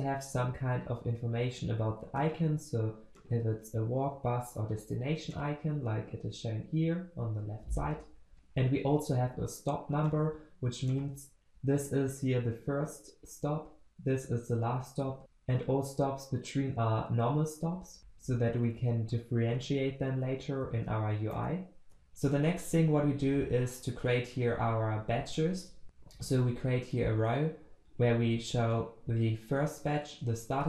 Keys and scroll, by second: 3.3 ctrl+b, 8.3 ctrl+alt+Left, 10.1 ctrl+alt+Left, 10.2 ctrl+b, 21.3 ctrl+alt+Left.